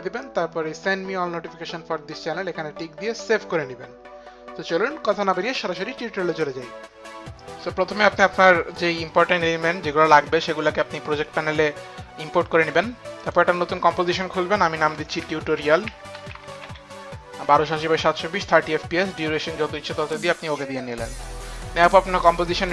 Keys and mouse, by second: 2.1 click, 3.1 click, 3.3 click, 6.3 click, 8.2 click, 13.2 click, 14.7-18.3 typing, 16.6 click, 19.6-20.4 typing, 20.4 click, 22.5 click.